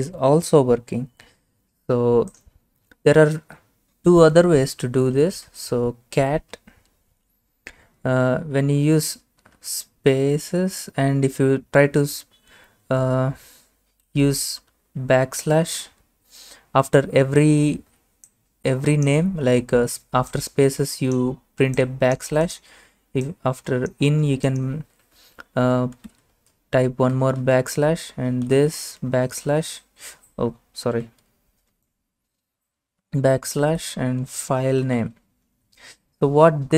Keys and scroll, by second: 5.0-6.4 typing, 9.3-10.6 typing, 13.7-15.8 typing, 25.2-29.2 typing, 31.7 Up, 32.8-36.1 typing.